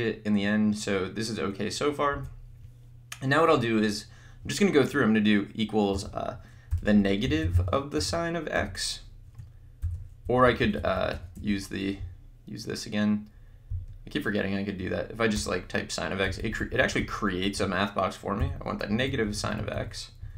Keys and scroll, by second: 2.2 BackSpace, 5.9-8.6 typing, 9.8 ), 10.2 BackSpace, 15.3 Return, 16.3 x, 16.4 Left, 18.4 -, 18.9 Right.